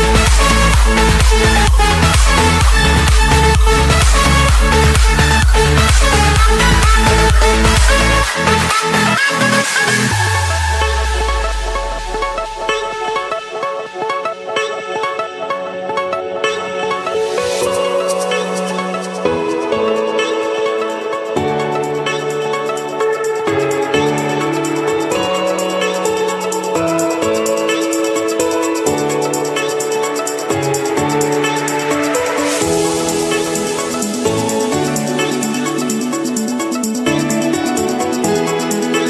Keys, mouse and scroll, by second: 0.2 middle click, 1.9-2.4 typing, 3.5 Return, 6.9 click, 7.7 Return, 9.5-10.6 drag, 10.9 Return, 13.0 click, 13.8 Return, 15.7-16.7 drag, 17.1 Return, 18.9 click, 19.6 Return, 21.3 click, 24.0 click, 24.8 click, 25.3-26.9 drag, 28.1 click, 29.0 click, 29.4-29.9 scroll, 30.5 click, 31.0 scroll, 32.2 click, 32.4-33.4 middle drag, 33.6 Escape, 35.0-36.3 typing, 38.1-39.0 drag.